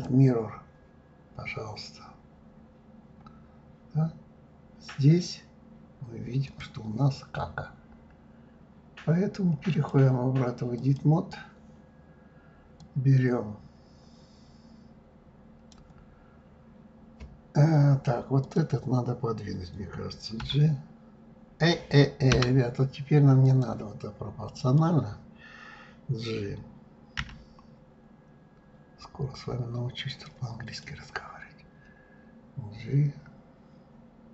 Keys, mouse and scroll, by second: 1.2-2.1 scroll down 2, 2.1-3.4 scroll up 10, 6.4 click, 9.7-15.8 drag, 18.3 click, 20.4 g, 23.4 click, 24.5-27.2 drag, 27.2 g, 30.8-33.9 middle drag.